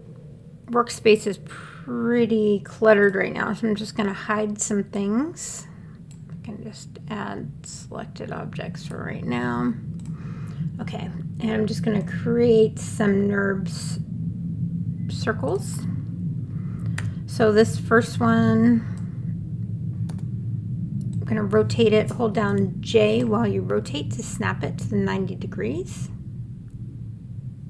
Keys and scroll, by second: 17.2 w, 20.3 e, 23.1 j.